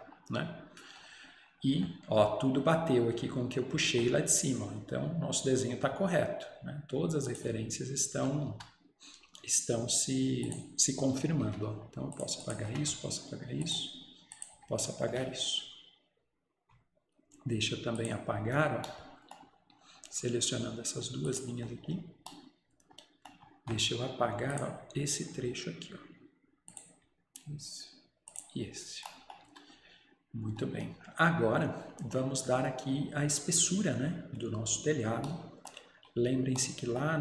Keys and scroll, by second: 8.6 Escape, 11.5 Delete, 12.7 Delete, 14.6 Delete, 29.5 Escape.